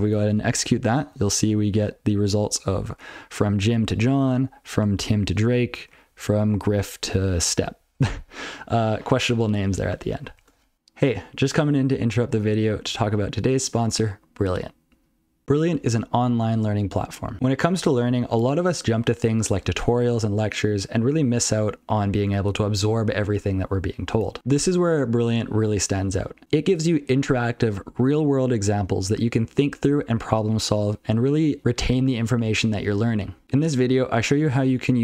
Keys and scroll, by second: 0.3 ctrl+c, 0.9 ctrl+n, 1.1 ctrl+n, 1.2 ctrl+n, 1.4 ctrl+n, 1.6 ctrl+n, 2.0 ctrl+a, 3.2-3.6 ctrl+f, 3.8 ctrl+n, 4.2 ctrl+a, 4.3 ctrl+n, 4.7 ctrl+p, 4.9-5.3 ctrl+f, 5.4 ctrl+n, 5.6 ctrl+f, 5.9 ctrl+n, 6.1 ctrl+a, 6.2 ctrl+f, 6.5-6.8 ctrl+f, 7.3 ctrl+f, 8.0 ctrl+f.